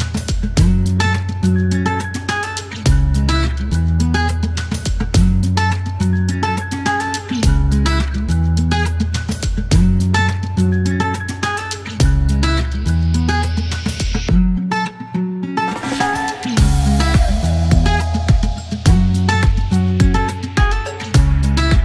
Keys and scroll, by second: 2.5 typing, 4.3 KP_2, 4.4 Return, 5.7 alt+q, 7.9 alt+q, 9.1 alt+k, 9.2 alt+k, 9.3 typing, 11.3 space, 11.6 space, 13.3 space, 15.3 space, 17.6 space, 20.5-20.8 typing.